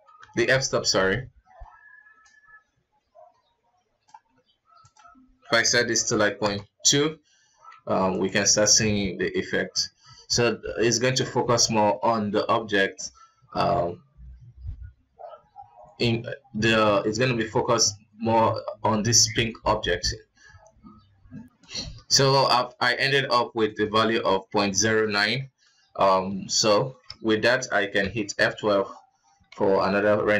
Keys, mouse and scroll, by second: 1.6 middle click, 1.6 scroll up 2, 2.5-7.7 drag, 7.7 middle drag, 7.7 scroll down 1, 7.9 z, 10.6 alt+a, 22.6 click, 23.1 scroll down 1, 23.9-25.2 drag, 25.7 scroll down 2, 26.5-27.2 scroll down 2, 27.2 z.